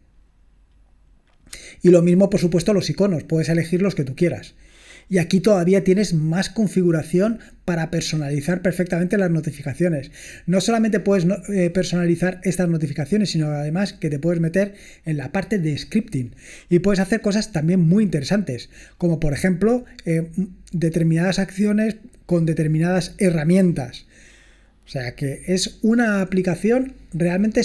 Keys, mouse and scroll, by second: 0.0 click, 0.6-2.7 scroll down 2, 5.3-6.5 scroll up 2, 6.5-9.4 scroll up 1, 9.4 scroll up 1, 9.7-10.7 scroll down 2, 10.7-14.1 scroll up 2, 14.1 scroll up 1, 16.5-17.4 scroll down 2, 17.4 scroll down 1, 18.9-20.1 scroll down 2, 20.1-20.7 scroll down 1, 26.3-27.4 scroll down 2.